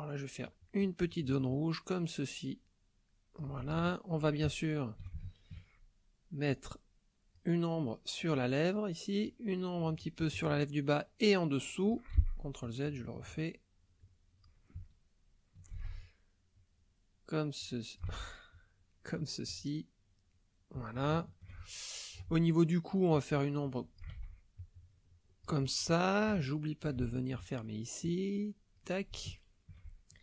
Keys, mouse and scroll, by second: 3.8 shift+middle click, 4.5 ctrl+shift+middle click, 4.7 ctrl+click, 5.2 ctrl+shift+middle click, 6.5-7.5 drag, 9.2-12.1 drag, 12.1 ctrl+z, 12.6-14.6 ctrl+drag, 14.9 ctrl+click, 15.7 ctrl+z, 16.5-18.2 drag, 18.1 ctrl+z, 18.5-21.0 ctrl+drag, 21.1 shift+click, 21.8 ctrl+shift+click, 23.1-24.2 drag, 24.1 ctrl+z, 24.6-25.6 ctrl+drag, 26.0 shift+click, 26.5-27.5 ctrl+shift+drag, 28.0 click, 29.3 shift+middle click, 29.9 ctrl+shift+middle click.